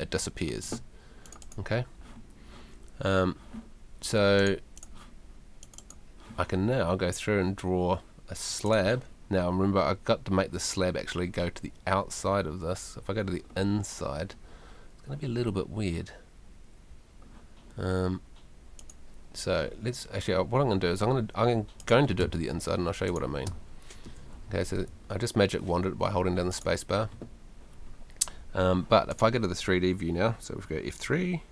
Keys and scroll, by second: 22.2 space, 24.5 Escape.